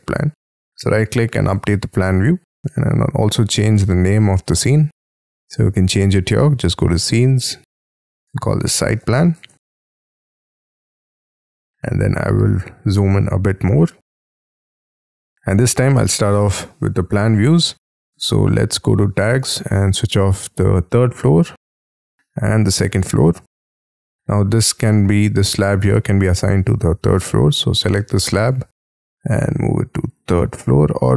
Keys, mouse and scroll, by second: 0.7 right click, 8.2-11.8 typing, 11.8-13.3 scroll up 14, 14.2-14.5 scroll down 1, 14.5 scroll up 1.